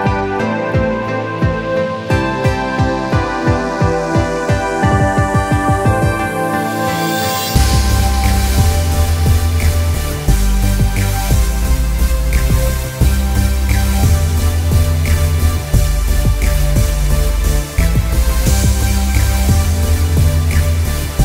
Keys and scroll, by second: 0.4 ctrl+=, 0.6 ctrl+=, 0.7 ctrl+=, 0.9 ctrl+b, 2.5 ctrl+b, 4.9 ctrl+b.